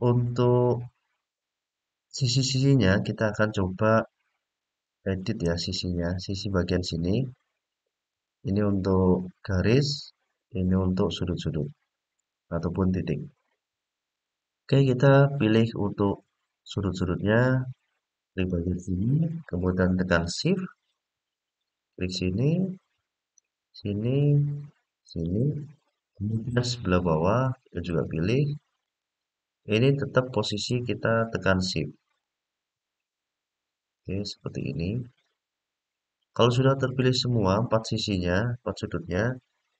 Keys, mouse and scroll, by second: 5.2 middle click, 7.8 click, 10.6 click, 12.0-13.2 middle drag, 15.2-16.9 middle drag, 18.1 click, 21.5 shift+click, 23.1 shift+click, 24.8 shift+click, 26.3-27.6 middle drag, 28.5 shift+click, 30.2 shift+click, 31.8 shift+click, 33.7 shift+click, 34.9-35.9 middle drag, 36.6 middle click.